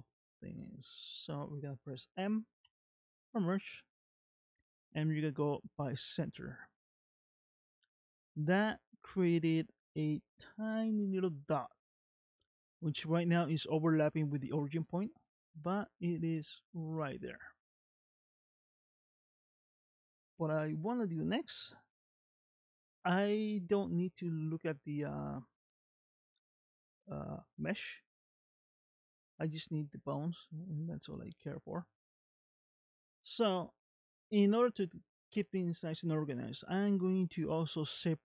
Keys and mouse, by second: 2.6 m, 9.8 g, 15.0 shift+middle click, 15.7 shift+middle click, 17.0-18.3 middle drag, 22.0 Tab, 23.2 click, 31.1-32.4 middle drag, 34.3 middle click, 35.5 shift+middle click.